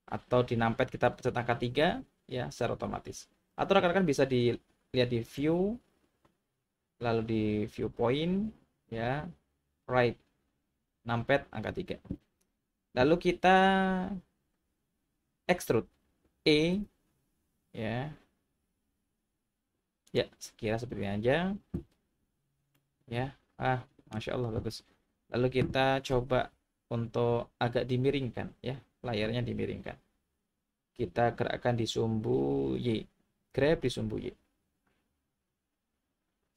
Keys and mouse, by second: 5.4-11.8 drag, 16.7 e, 20.1 click, 22.7-24.1 middle drag, 26.5 KP_3, 33.5 g, 33.8 y.